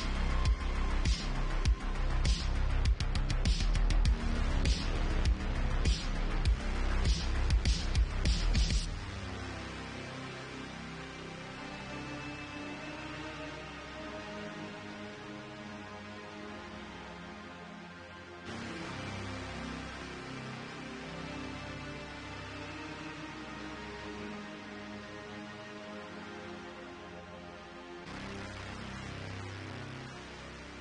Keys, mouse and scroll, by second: 0.3 g, 1.6 alt+middle click, 1.8 alt+click, 1.9-3.4 alt+middle drag, 2.6 shift+Tab, 3.4-6.2 drag, 5.1 g, 6.2 alt+middle click, 6.6 alt+click, 6.7-8.2 alt+middle drag, 7.0 g, 7.8 ctrl+z, 8.2 alt+click, 8.3 alt+middle click, 8.7 g, 10.0 ctrl+r, 13.0 ctrl+z, 14.1 ctrl+r, 15.6 click, 16.5 j, 16.8 click, 17.3 shift+click, 17.6 j, 17.9 click, 18.3 shift+click, 18.5 j, 19.2 Tab, 22.4 Tab, 23.2 ctrl+r, 28.5 ctrl+r.